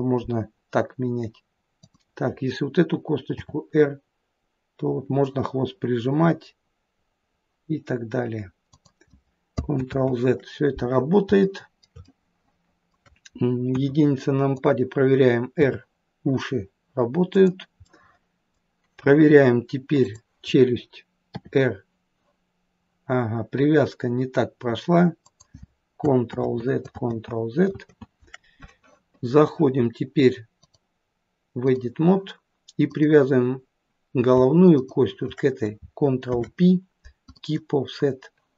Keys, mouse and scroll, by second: 1.9 click, 3.4 r, 9.9 ctrl+z, 11.5 shift+middle click, 12.1 middle click, 13.7 KP_1, 15.1 click, 15.7 r, 17.9 middle click, 20.0 click, 21.3 r, 26.4 ctrl+z, 27.0 ctrl+z, 27.9 ctrl+z, 30.6 click, 32.9 click, 34.8 shift+click, 36.3 ctrl+p.